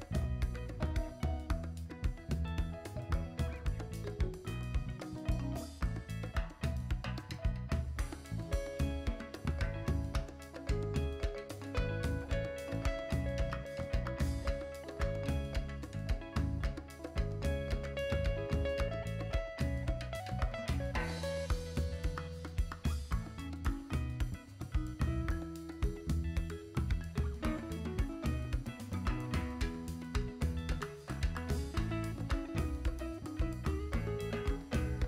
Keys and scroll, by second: 7.8 s, 10.7 g, 17.7 Tab, 31.9 s, 32.9 Tab.